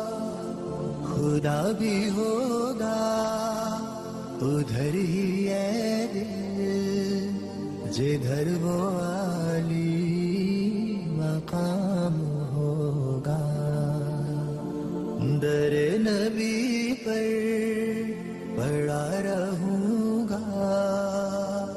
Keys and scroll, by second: 5.4 shift+Page_Down, 8.9 alt+c, 9.0 alt+w, 9.4 p, 16.0 alt+c, 16.0 alt+w, 16.4 p.